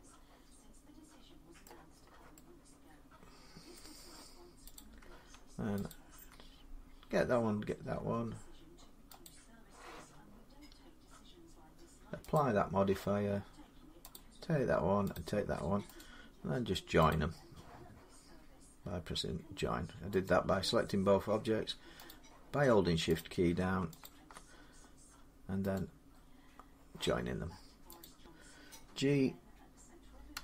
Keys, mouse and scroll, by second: 1.4 middle click, 1.7 scroll down 4, 3.5 middle click, 4.6 click, 5.7 shift+click, 9.1 click, 12.2 click, 13.9 click, 15.0 shift+click, 15.8 right click, 16.9 click, 20.1 right click, 21.9 click, 23.0 click, 23.8 shift+click, 25.6 right click, 27.8 click, 30.1 g.